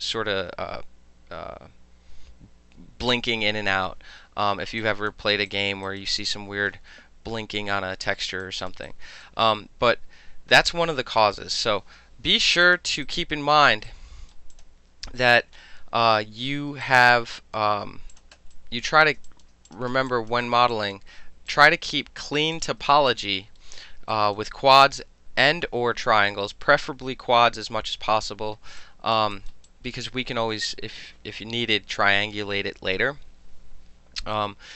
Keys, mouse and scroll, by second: 4.9 alt+drag, 5.5 alt+click, 5.9 alt+right click, 6.2 alt+click, 8.5 alt+drag, 8.9-9.3 alt+drag, 11.2 click, 12.3 Delete, 12.7 click, 13.1-13.6 right drag, 13.6-13.9 middle drag, 13.9-14.4 right drag, 14.4 middle click, 14.6 click, 14.7-15.0 middle drag, 16.9-17.6 alt+drag, 18.2 click, 18.6 alt+click, 19.3 alt+click, 19.7 click, 19.8-20.1 alt+middle drag, 20.1 alt+click, 20.4 alt+middle click, 20.5 alt+right click, 20.6 alt+middle click, 20.8 alt+click, 21.0 alt+middle click, 21.5 alt+click, 21.7 alt+middle click, 22.3-22.6 alt+middle drag, 22.6 alt+click, 22.7-23.1 alt+middle drag, 23.1 alt+click, 23.4 alt+middle click, 23.8 alt+middle click, 24.2 alt+click, 24.4 alt+middle click, 25.0-25.5 alt+middle drag, 28.8-29.2 alt+drag, 29.4 alt+right click, 29.7 alt+drag.